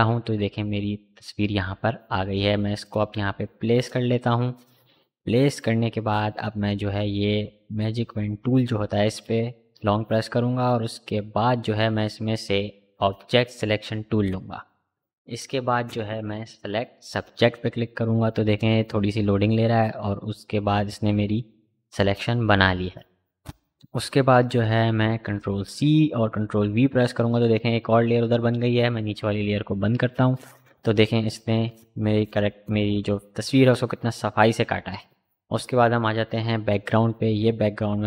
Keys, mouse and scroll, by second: 1.0-7.0 drag, 9.1-13.8 right drag, 14.0 click, 17.1 click, 23.4 click, 24.6 ctrl+c, 29.0 click, 33.6 click, 36.7 right click.